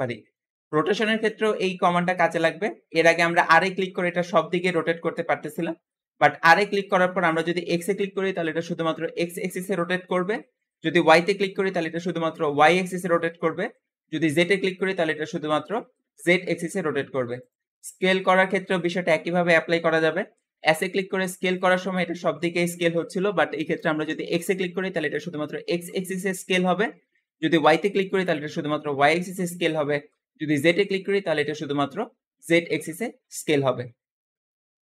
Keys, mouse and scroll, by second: 0.5-1.1 scroll up 3, 1.1-2.2 shift+middle drag, 2.2-3.2 scroll up 1, 3.2 r, 17.7-18.1 scroll down 1, 18.1-20.5 shift+middle drag, 20.5 s.